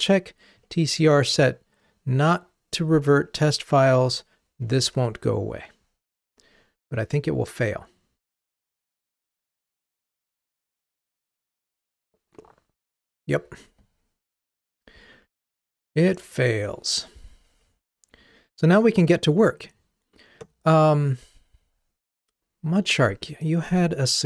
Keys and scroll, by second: 4.8 ctrl+r.